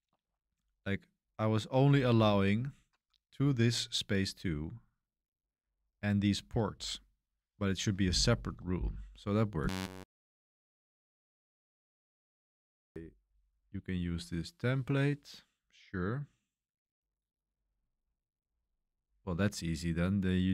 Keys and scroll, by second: 0.0-0.4 typing, 1.5-4.4 typing, 5.5-7.9 typing.